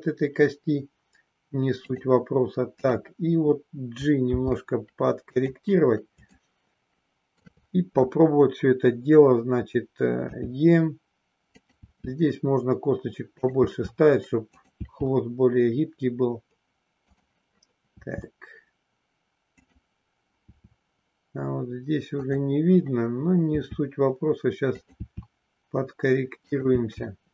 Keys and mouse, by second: 1.7 click, 4.2 g, 5.4 click, 6.5 shift+middle click, 10.2 e, 11.6 click, 11.8 e, 13.4 click, 14.6 click, 14.8 e, 17.1 click, 18.0 e, 20.5 e, 22.3 click, 23.5 e, 24.7 click, 25.0 e, 26.5 click.